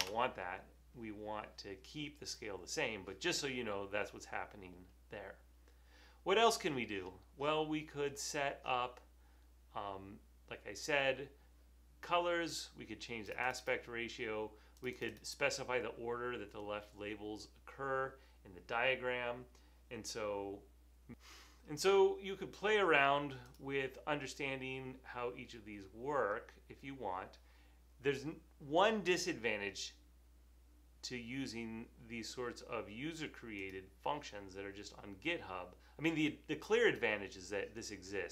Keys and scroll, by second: 0.1 BackSpace.